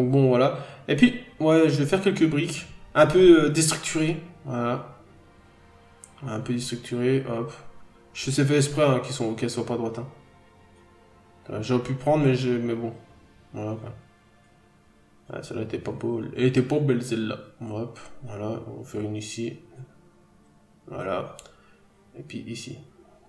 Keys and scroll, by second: 2.3 b, 4.6 n, 5.3 b, 9.3 n, 9.6 b, 11.8 n, 12.5 b, 14.6-15.0 scroll down 1, 15.0 ctrl+z, 15.1 scroll up 1, 15.4 n, 15.5 ctrl+z, 15.7 b, 17.4 scroll down 1, 17.7 n, 17.9-18.3 scroll up 1, 18.5 b, 19.5 ctrl+z, 20.8-21.2 scroll down 1, 21.6 ctrl+z, 22.5-22.9 scroll down 1, 23.2 scroll up 1.